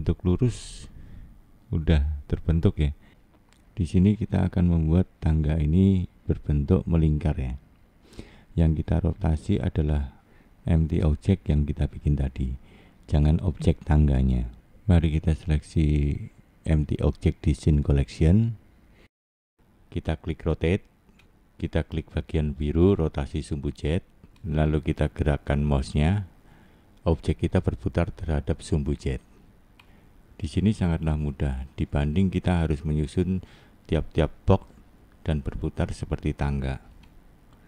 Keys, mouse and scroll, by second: 0.8 click, 4.9-5.5 scroll down 2, 5.5 middle click, 6.4 scroll up 1, 7.6 shift+middle click, 10.7 middle click, 14.7 middle click, 15.7 middle click, 16.7 middle click, 20.0 click, 20.8 middle click, 21.9-24.2 scroll down 1, 24.2 click, 26.2 middle click, 31.2 shift+middle click, 32.5 scroll up 2, 34.2 middle click, 34.7 middle click, 36.3 click.